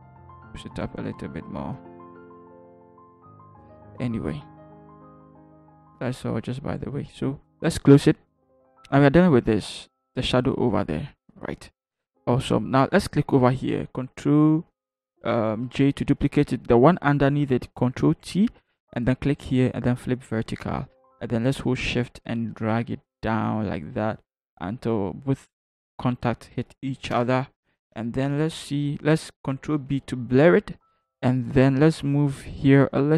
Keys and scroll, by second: 15.6 ctrl+j, 18.0 ctrl+t, 27.1 shift+Return, 30.3 ctrl+b.